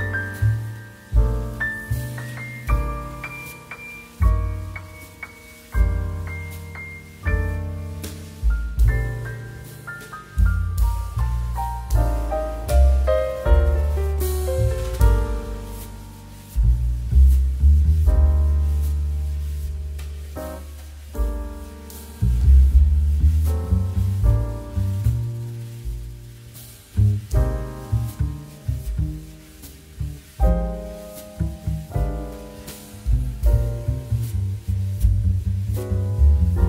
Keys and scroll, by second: 4.6 space, 6.0 space, 7.9 ctrl+h, 8.7 2, 11.5 space, 12.6 space, 14.0 2, 14.8 space, 16.7 2, 20.0 2, 20.9 ctrl+s, 24.7 ctrl+k, 25.2 ctrl+2, 27.7 ctrl+KP_0, 30.5 x, 35.5 z.